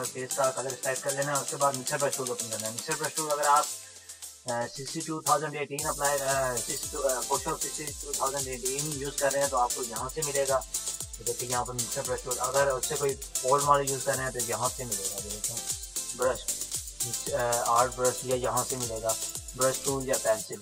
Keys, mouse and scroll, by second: 0.0 click, 10.1 right click, 11.7 click, 15.1 right click, 15.1 right click, 18.7 right click.